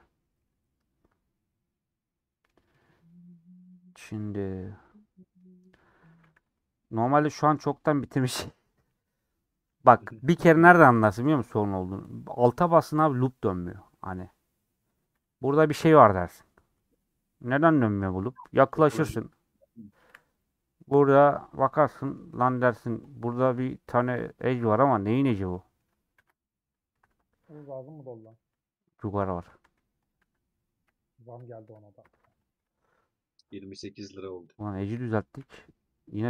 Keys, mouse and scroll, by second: 0.1 ;, 0.3-5.5 middle drag, 5.5-5.9 scroll up 2, 5.9 middle click, 6.4 3, 7.6 middle click, 8.4-8.9 scroll up 2, 9.1 1, 10.3 scroll down 2, 11.1 3, 11.2 click, 11.6-12.0 scroll up 2, 12.5 alt+click, 18.7 KP_Decimal, 19.4-19.8 scroll down 6, 19.8 scroll up 1, 20.2 2, 20.6-22.9 middle drag, 22.9 click, 23.2-26.2 middle drag, 26.2 ctrl+x, 26.5-26.9 scroll down 3, 27.1 alt+click, 27.6 scroll down 2, 28.0 middle click, 28.2 scroll up 1, 28.4 1, 30.3 a, 32.2 3, 32.3 alt+click, 35.5-36.2 middle drag.